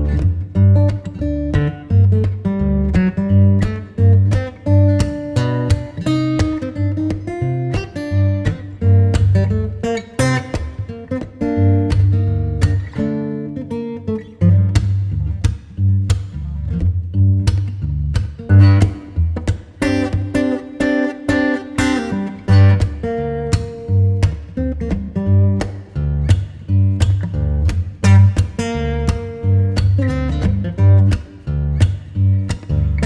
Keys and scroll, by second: 8.0 [, 22.8 space, 31.4 space, 32.7 ].